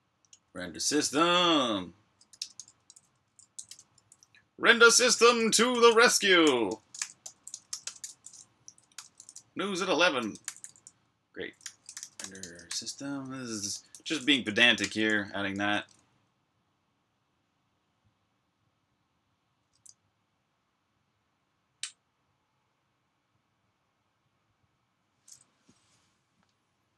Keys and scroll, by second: 0.2-7.9 typing, 8.8 super+], 10.2 Escape, 10.3-16.6 typing, 16.7 super+h.